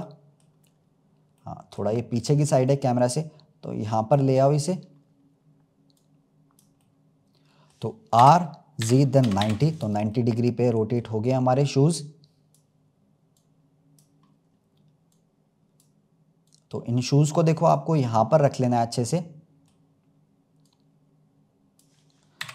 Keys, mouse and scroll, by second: 0.0-0.5 middle drag, 0.5-1.3 scroll down 2, 1.3-2.6 middle drag, 2.6 click, 4.4-4.9 scroll up 1, 5.9 click, 6.7-8.1 middle drag, 8.1 r, 10.1-11.5 middle drag, 11.5 click, 13.3-14.3 drag, 14.3-15.1 scroll up 1, 15.1-16.5 drag, 17.9-18.3 scroll up 2, 18.4-20.5 middle drag, 20.5 click.